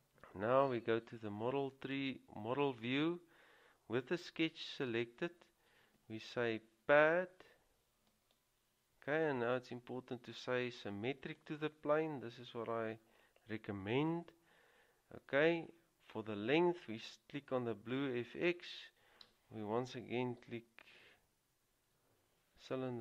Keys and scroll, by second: 21.9 typing.